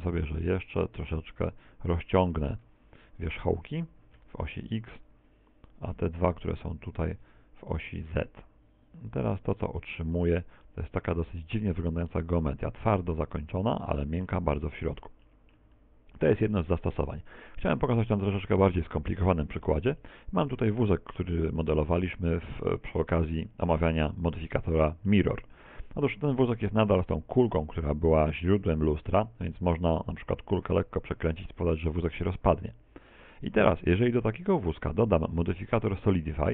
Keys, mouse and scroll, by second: 11.5 Tab, 12.2 middle click, 12.9 right click, 13.3 shift+right click, 13.7 shift+right click, 14.1 z, 14.4 shift+right click, 14.7 s, 15.5 click, 15.9 right click, 15.9 middle click, 16.1 shift+right click, 16.7 click, 16.8 Tab, 22.8 middle click, 22.9 middle click, 22.9 z, 23.6 middle click, 24.1 middle click, 25.0 middle click, 25.5 middle click, 25.9 x, 27.0 r.